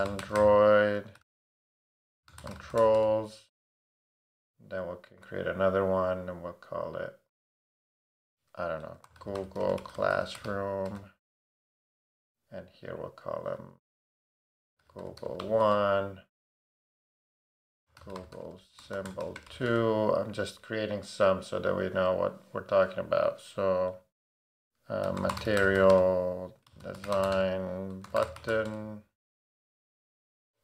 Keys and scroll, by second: 0.0-3.3 typing, 8.8-11.4 typing, 11.5 Return, 14.4-15.9 typing, 17.6-19.9 typing, 24.8-29.0 typing.